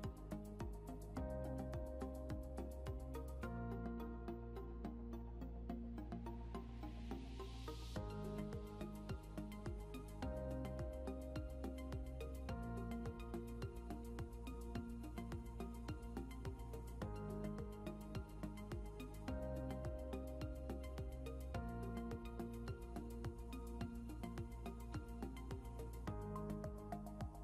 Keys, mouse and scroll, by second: 1.7 click, 8.3 click, 14.0 s, 16.2-16.6 typing, 18.4 l, 25.8 click.